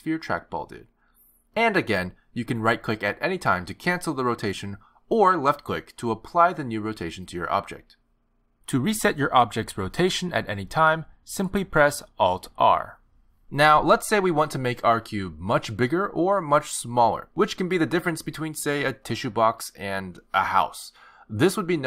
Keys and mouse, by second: 6.0 alt+r, 7.3 r, 9.7 alt+r.